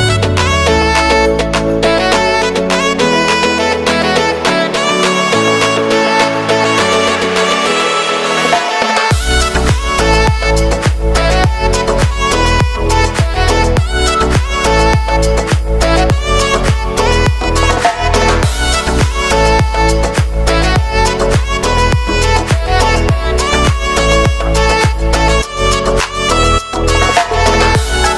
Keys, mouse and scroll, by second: 1.1 space, 1.5 click, 1.8 space, 3.5 ctrl+alt+shift+y, 5.7 ctrl+a, 6.1-8.8 drag, 9.1 s, 10.1 click, 13.9 Return, 15.4-18.7 drag, 18.7 j, 19.1 space, 21.6 space, 21.9 k, 22.9 click, 24.0 Return, 24.8 j, 25.1 space, 27.9 space.